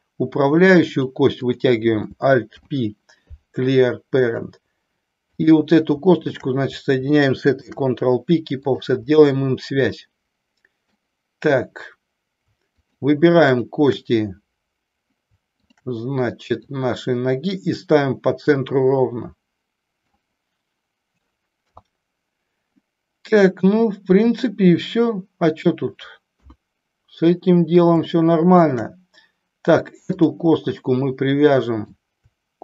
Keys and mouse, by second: 1.0 click, 2.5 alt+p, 5.3 click, 6.3 shift+click, 7.5 ctrl+p, 9.9-11.1 middle drag, 12.8 shift+click, 13.5 shift+click, 15.5 shift+click, 16.6-20.0 drag, 21.6 KP_3, 26.3 KP_1, 28.0 shift+middle click, 30.3 click, 30.8-31.9 middle drag.